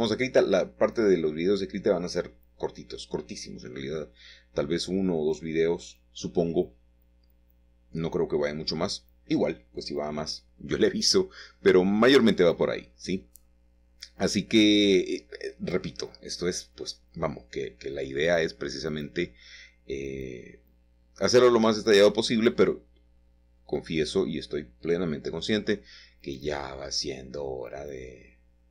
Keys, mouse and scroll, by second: 0.0 Tab, 3.0 Tab, 5.1-9.0 drag, 9.3-10.1 scroll up 1, 10.1 shift+middle click, 13.5-14.5 drag, 14.5 ctrl+t, 16.6-18.4 drag, 19.8-20.4 scroll up 1, 20.4-21.6 shift+middle drag, 21.4-22.1 scroll down 1, 23.0-25.3 middle drag, 27.0-28.4 drag.